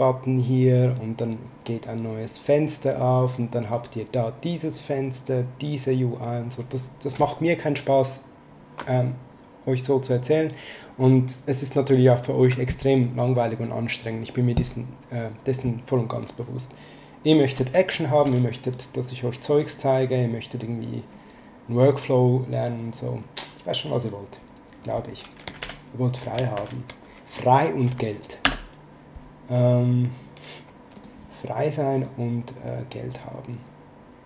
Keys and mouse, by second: 3.6 click, 17.3 click, 18.7 click, 23.8 click, 25.6 ctrl+Right, 26.5 ctrl+Right, 28.4 space, 30.9 click.